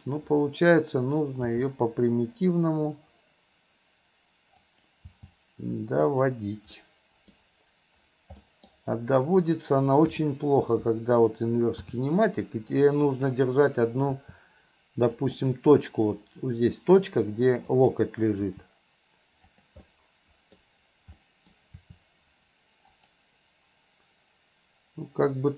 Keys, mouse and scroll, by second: 1.6 g, 5.2 g, 6.8 middle click, 8.5 scroll up 1, 8.6 middle click, 8.7 scroll down 1, 9.4 click, 11.9 r, 14.2 r, 17.7 click, 18.5 r, 19.9-20.6 middle drag, 21.2 middle click, 21.8 r.